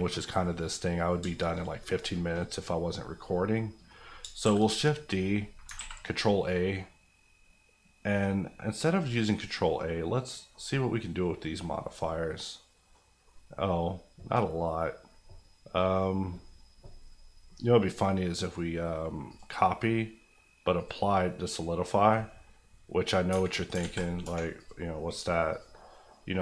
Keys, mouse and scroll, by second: 0.2 middle click, 1.2 shift+middle click, 1.6-2.0 shift+scroll down 1, 2.0 middle click, 2.8-3.2 scroll up 1, 3.2 middle click, 4.2 shift+middle click, 4.4 shift+d, 4.7 right click, 5.7 ctrl+right click, 5.7 ctrl+a, 6.4-8.9 drag, 9.3 middle click, 12.2 middle click, 13.5 middle click, 17.8 click, 23.3 Tab, 23.8 alt+z, 24.2 3, 24.6 click, 24.9 middle click, 25.5 click, 25.8 middle click.